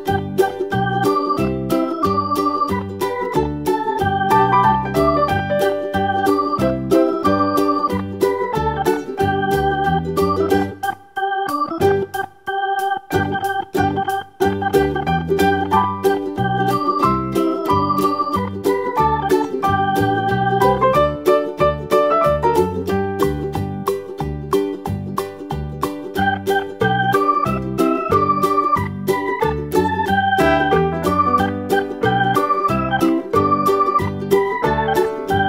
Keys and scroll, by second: 19.7 super+d, 23.8 super+d, 24.2 super+d, 24.8 super+d, 30.0 super+d, 35.3 super+d.